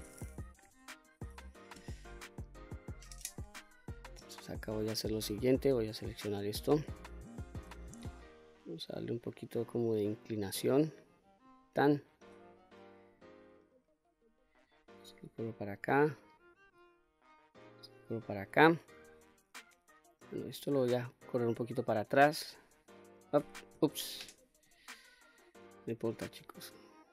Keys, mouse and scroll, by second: 0.6 KP_Enter, 0.6 KP_3, 2.5-5.0 scroll up 2, 5.0-6.0 drag, 7.6 r, 11.5 click, 12.2 click, 13.2-15.0 drag, 15.6 click, 16.7-17.9 drag, 19.0-20.2 drag, 21.1 click, 22.5 click, 23.9 ctrl+z, 24.7 click, 25.3 click, 26.8-27.1 drag.